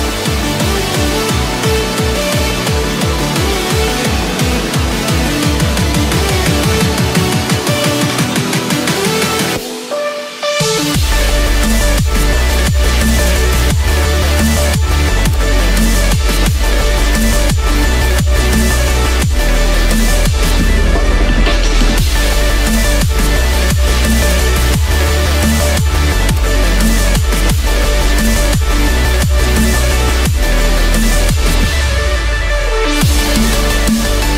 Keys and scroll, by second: 1.4 ctrl+-, 2.2 ctrl+-, 4.0 ctrl+=, 4.5 ctrl+space, 5.9 ctrl+-, 6.7 ctrl+=, 14.5 ctrl+-, 15.0 ctrl+=, 24.5 ctrl+-.